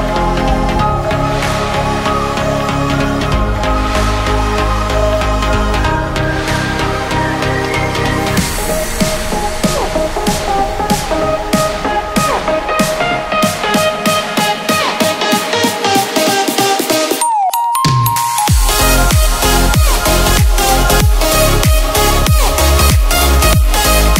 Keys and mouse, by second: 0.5 a, 0.6-1.3 l, 1.4 a, 3.2 g, 5.3 click, 6.1 ctrl+z, 6.5 a, 7.0 l, 8.3 a, 8.5 l, 8.6 h, 12.8 g, 13.3 middle drag, 14.7 a, 14.9 z, 15.6 Tab, 15.6 a, 15.9-17.3 drag, 17.3 Tab, 17.9 right click, 18.8 a, 19.5 ctrl+z, 20.1 right click, 20.8 a, 22.7 Tab, 22.7 a, 23.2 a.